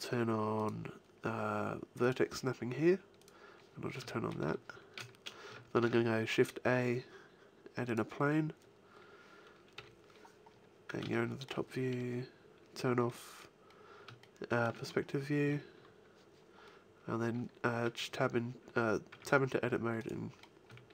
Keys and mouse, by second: 0.5-2.3 drag, 3.2 click, 4.1-5.8 middle drag, 5.8 shift+a, 9.7 KP_7, 10.5 middle click, 10.9 middle click, 12.0 KP_5, 15.4 z, 19.1 Tab, 20.6 a.